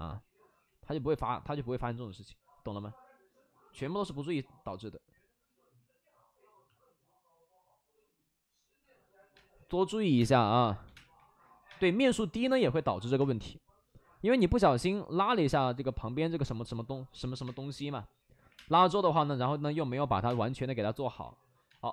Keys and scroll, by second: 0.6 ctrl+z, 1.8 ctrl+z, 2.0 ctrl+z, 9.3-11.6 typing, 12.8 ctrl+z, 13.6 3, 17.1 ctrl+z, 17.4-18.6 typing, 19.4 ctrl+z, 20.0 5, 20.2 space, 21.0 ctrl+z, 21.6 space.